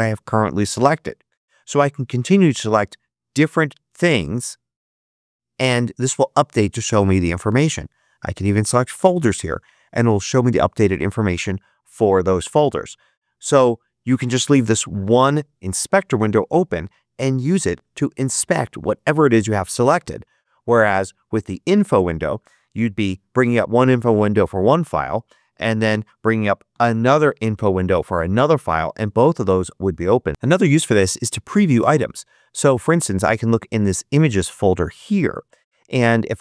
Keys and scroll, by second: 22.7 super+i, 26.6 super+i.